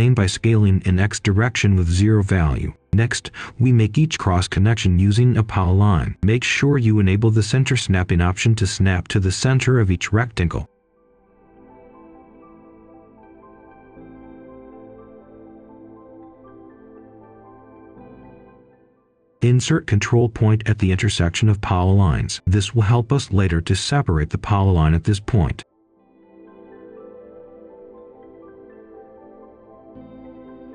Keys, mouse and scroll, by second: 1.1 0, 1.3 Return, 1.6 click, 2.0-3.3 right drag, 4.2 click, 7.1 ctrl+shift+d, 9.8 click, 11.8-13.8 right drag, 14.0 click, 14.5 right click, 15.7 click, 17.4 right click, 18.5 scroll up 1, 19.3 click, 24.5 right click, 25.1 click, 26.5 right click, 27.3 shift+right click, 28.2 ctrl+right click.